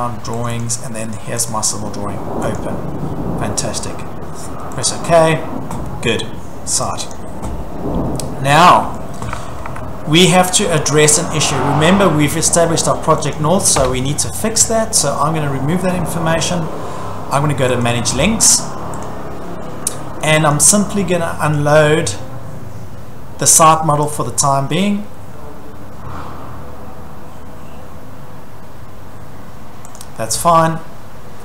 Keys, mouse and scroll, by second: 0.5 click, 0.6 click, 1.5 click, 2.6 click, 4.9 click, 7.0 click, 7.1 click, 8.1-8.5 scroll, 9.0-9.8 scroll, 9.4 Escape, 9.6 Escape, 11.0 scroll, 13.4 click, 13.8 Delete, 14.5 middle click, 14.6 middle click, 14.6 middle click, 15.2 middle click, 17.9 click, 19.1 click, 19.6 scroll, 20.5 click, 30.0 click.